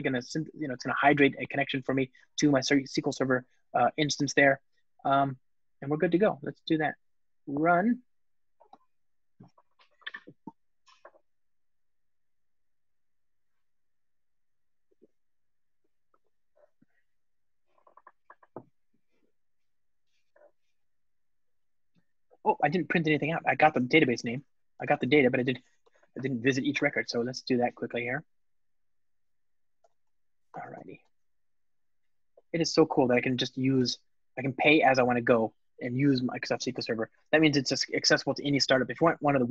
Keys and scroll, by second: 8.3 ctrl+shift+r, 25.4 Return, 31.7 alt+super+l, 32.8 ctrl+r.